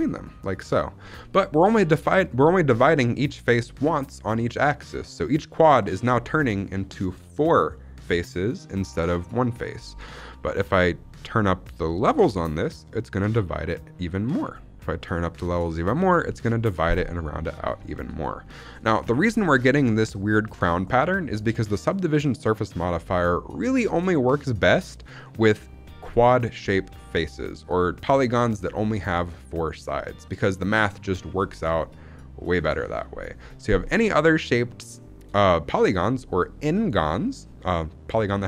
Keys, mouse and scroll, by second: 0.9 Tab, 1.8-4.0 scroll up 1, 11.8 click, 15.5 click, 17.4 scroll down 2, 17.8 shift+middle drag, 17.9 scroll up 2, 18.4-18.9 shift+middle drag, 19.0 shift+middle drag, 19.3-19.9 middle drag, 33.5-34.4 scroll down 2, 33.9-34.4 middle drag, 34.5 scroll down 2, 34.8-35.2 shift+middle drag, 35.3-36.1 middle drag, 36.1-37.1 scroll up 1.